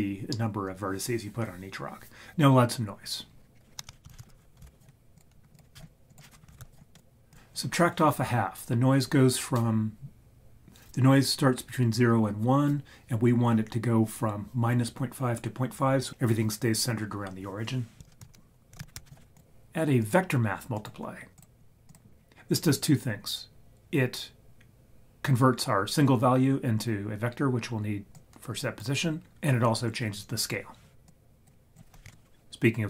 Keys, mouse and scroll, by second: 3.1-3.5 scroll down 3, 3.5-4.0 scroll up 3, 4.1 shift+a, 5.8 scroll up 1, 6.1-7.0 drag, 7.3 click, 18.0 click, 18.0 shift+a, 18.2 shift+a, 20.8 click, 21.9 click, 22.1-23.3 scroll down 1, 23.3 scroll down 1, 28.1 click, 31.2 click, 31.7 click.